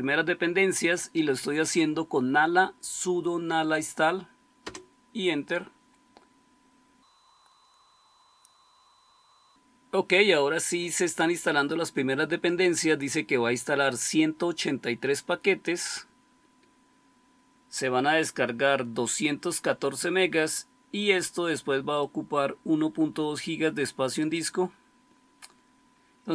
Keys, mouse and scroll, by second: 4.5 Return.